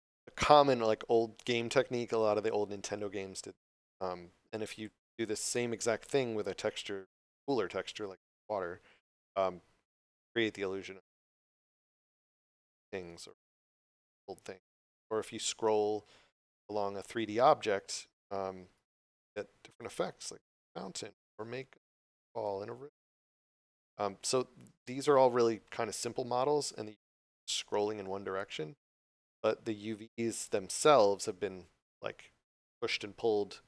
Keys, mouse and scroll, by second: 1.8 click, 7.7 d, 8.3 w, 8.3 d, 10.2 s, 13.8 s, 14.4 w, 17.3 a, 17.7 d, 18.9 s, 19.7 a, 22.0 d, 22.4 s.